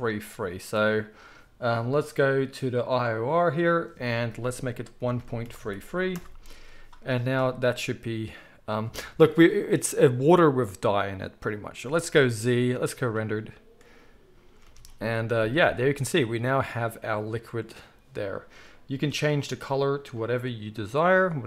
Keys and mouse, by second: 5.5 3, 12.3 z, 14.6 alt+a, 19.4-21.4 middle drag.